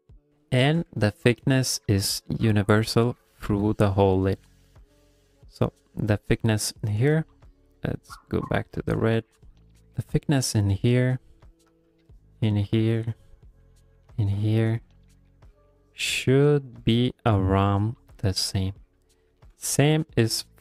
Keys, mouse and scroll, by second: 0.1 middle click, 0.4 shift+middle click, 1.3 middle click, 2.5 click, 3.2 middle click, 3.6 ctrl+middle click, 3.9 middle click, 5.1 click, 7.8-9.9 click, 10.2 click, 12.1 click, 14.1 click, 15.4 click, 15.8 click, 16.7 click, 17.2 click, 18.0 click, 18.4 click, 18.8 middle click, 19.3 shift+middle click, 19.6 middle click.